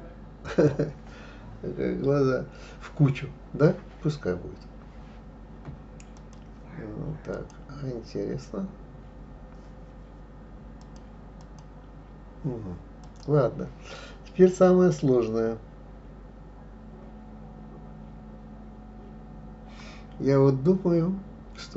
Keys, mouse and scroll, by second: 6.2 click, 7.3 click, 10.8 click, 11.4 click, 13.0 click.